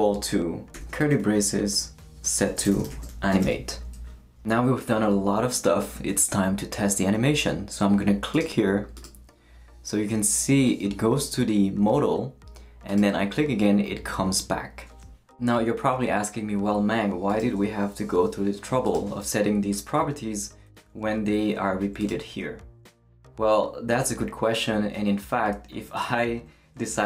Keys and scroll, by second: 0.7 shift+[, 2.2-3.9 typing.